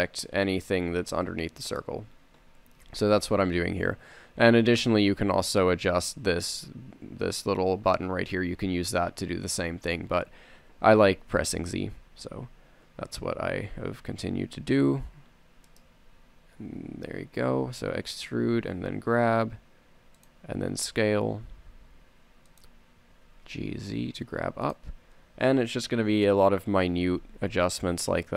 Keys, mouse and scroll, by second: 3.4 z, 12.7 e, 16.3 click, 17.1 g, 21.2 s, 23.4 g, 25.4 a, 27.9 z.